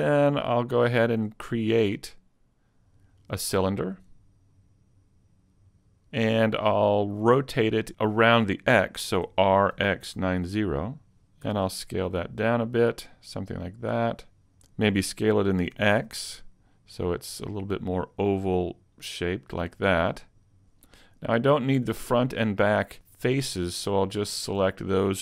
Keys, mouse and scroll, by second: 0.1-0.7 scroll up 2, 0.7 shift+middle click, 2.9 click, 5.5 click, 9.3 r, 11.5 s, 13.8 click, 14.9 scroll up 1, 15.7 s, 20.0 click, 20.6 ctrl+Tab, 20.6 middle click, 23.4 right click, 23.8 middle click, 24.7 shift+right click.